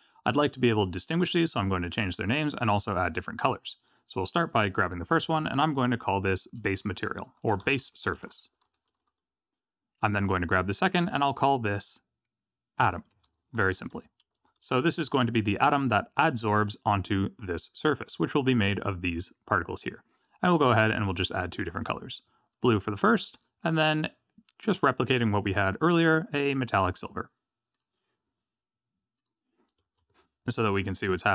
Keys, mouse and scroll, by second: 3.8 click, 5.0 F2, 10.3 click, 12.8 F2, 14.3 BackSpace, 18.3 click, 20.1 click, 21.1 click, 21.8 click, 23.3 click, 24.8 click, 25.6 click, 26.5 click, 27.7 click, 29.1 click.